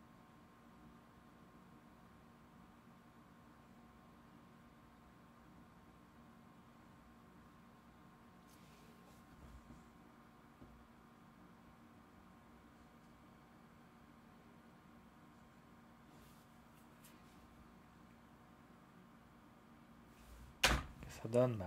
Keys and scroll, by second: 20.6 0.